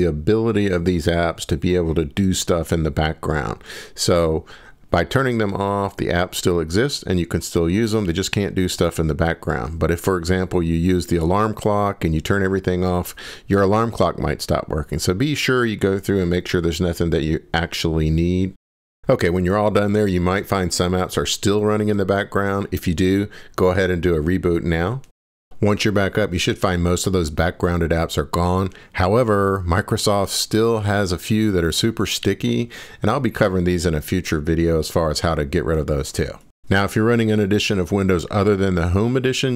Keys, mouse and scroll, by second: 3.1-4.2 scroll down 24, 5.0-6.0 scroll up 24, 10.5-11.8 scroll down 42, 11.9-13.8 scroll up 31, 13.9 click, 16.8-17.8 scroll, 18.0 ctrl+shift+Escape, 18.4 click, 18.7-20.1 drag, 21.0 click, 23.1 click, 23.6 click.